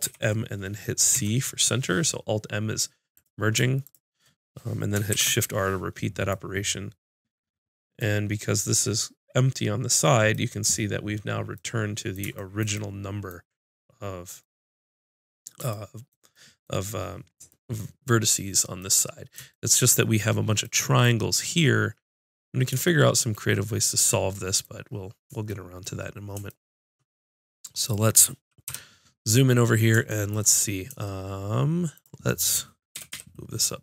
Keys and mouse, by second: 0.0 alt+m, 3.2-6.2 drag, 5.1 shift+r, 27.8-28.9 drag, 28.7 KP_Decimal, 32.0 click, 33.0 g.